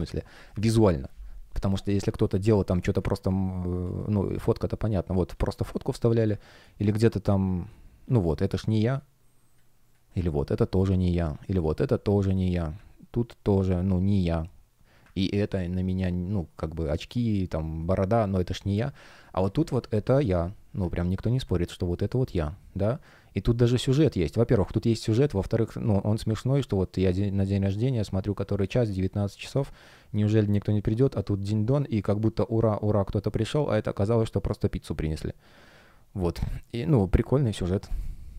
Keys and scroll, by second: 1.9 space, 3.7 space, 6.6 space, 10.5 space, 16.9 space, 18.8 super+space, 21.7 space.